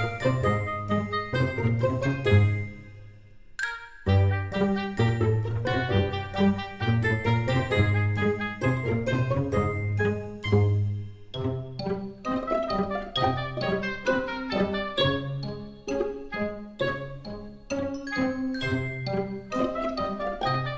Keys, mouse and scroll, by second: 19.2 s.